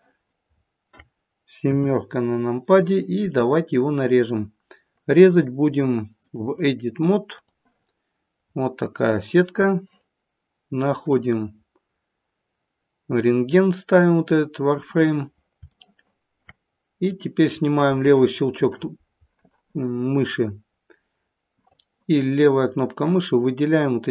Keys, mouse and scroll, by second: 0.4 scroll down 3, 1.6 KP_7, 2.2 scroll down 1, 6.2 click, 8.4 scroll up 3, 9.5-11.1 scroll down 1, 11.1 click, 15.8 shift+middle click, 17.0 click, 21.7 click.